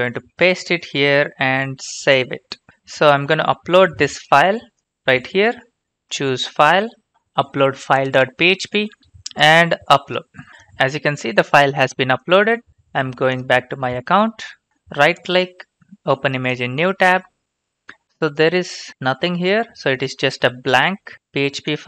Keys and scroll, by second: 0.2 ctrl+v, 1.9 ctrl+x, 2.3-3.2 typing, 18.9 ctrl+c.